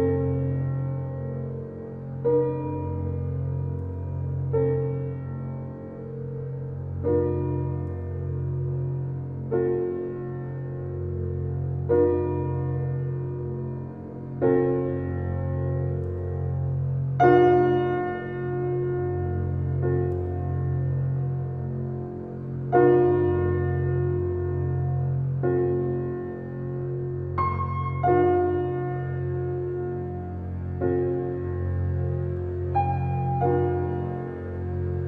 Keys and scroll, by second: 5.0 ctrl+j, 7.8 ctrl+t.